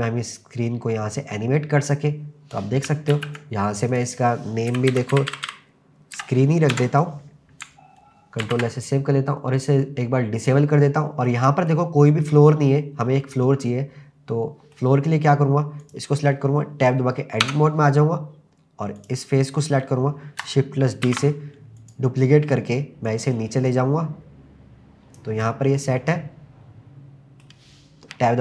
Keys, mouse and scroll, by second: 3.1 ctrl+z, 4.1-6.8 drag, 5.5 e, 8.5 ctrl+s, 10.4 click, 10.9-11.3 scroll up 1, 11.3-12.8 middle drag, 12.8-13.2 scroll down 2, 13.4-14.8 middle drag, 14.8 scroll down 1, 15.1-15.8 scroll up 2, 15.8 click, 17.4 Tab, 19.0 click, 21.0 shift+d, 21.8 click, 23.1 click, 25.4-27.4 middle drag.